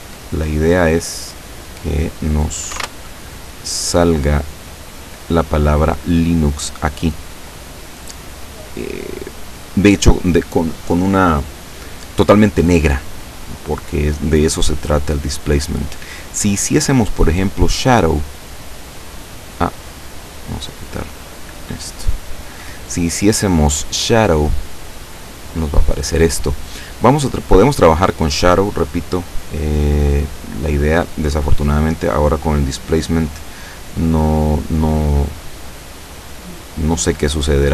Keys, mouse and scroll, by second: 1.9 click, 2.8 1, 3.1 Return, 3.9 click, 13.8 click, 15.5 click, 17.0 click, 20.1-20.6 drag, 21.2-21.7 drag, 22.0 click, 29.4 click, 31.8 click, 33.0 click, 35.9 scroll down 1, 37.2 click.